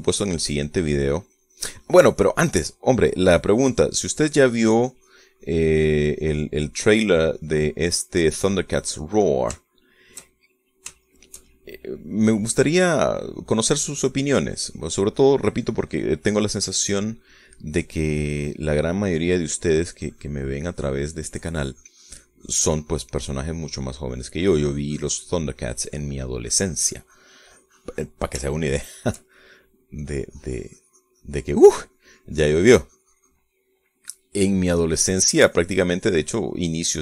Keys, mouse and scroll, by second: 4.0 middle click, 4.6-10.8 drag, 11.0-12.4 shift+middle drag, 13.2 middle click, 13.6-17.9 drag, 18.0 click, 19.1-20.2 drag, 20.4 middle click, 21.4-24.0 drag, 24.2 click, 24.7-26.7 drag, 28.9 click, 29.8-31.2 shift+middle drag, 31.4-34.9 drag, 34.9-35.9 middle drag, 36.3-37.0 drag.